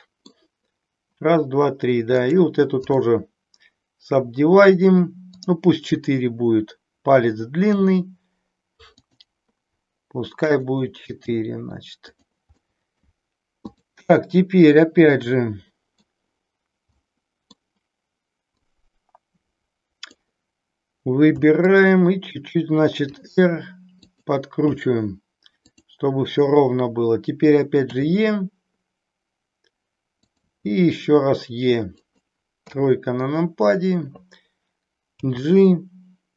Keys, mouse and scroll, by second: 2.2 right click, 5.4 click, 7.8 g, 10.5 click, 11.1 g, 12.1 click, 12.7 middle click, 13.5 click, 15.1 middle click, 17.0 middle click, 18.7-20.2 drag, 23.0 r, 24.0 click, 25.7 click, 27.8 e, 30.4 click, 30.6 e, 32.0 click, 32.7 KP_3, 35.2 g.